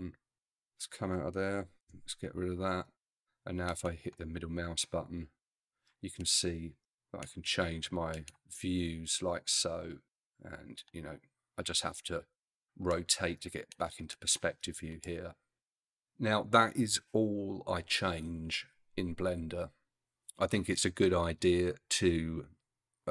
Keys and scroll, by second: 1.8 n.